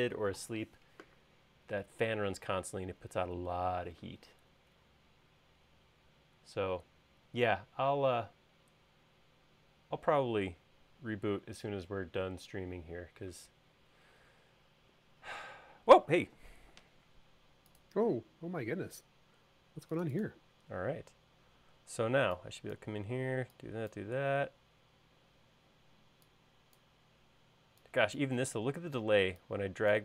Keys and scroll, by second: 20.8 e.